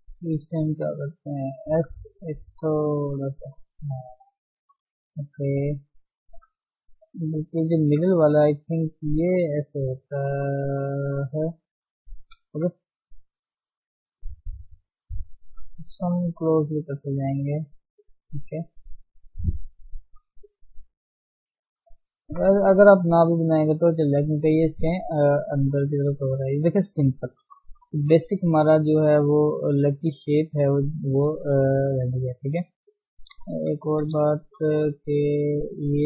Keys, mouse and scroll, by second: 0.4 click, 1.8 s, 3.3-3.9 scroll down 5, 3.9 Tab, 4.3-4.7 scroll up 1, 4.7 Tab, 5.3 click, 6.0-6.3 scroll up 1, 6.4 s, 7.6 click, 8.2 s, 12.3 click, 13.1 s, 15.1 click, 16.0 s, 18.0 click, 19.0 s, 21.8 click, 22.6 s, 24.0 shift+middle click, 24.7-25.6 scroll down 3, 25.7-27.9 middle drag, 27.9 KP_1, 29.6 click, 30.0-31.4 shift+middle drag, 31.4-32.1 scroll up 1, 32.2 click, 32.6 shift+middle click, 32.8-33.9 scroll up 3, 33.0 Tab, 33.9 Tab, 34.0-34.3 scroll down 2, 34.3 shift+z, 35.2 click, 35.8 click.